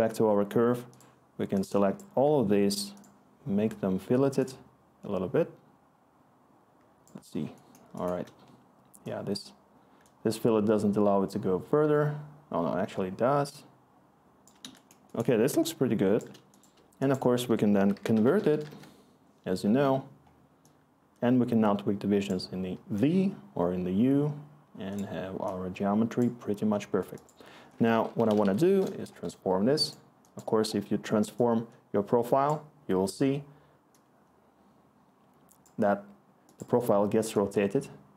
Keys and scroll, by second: 7.8-8.6 scroll, 8.6-9.1 scroll, 15.3-16.9 scroll, 16.9-17.2 scroll, 17.4 Tab, 17.6-19.0 typing, 27.7-28.9 typing.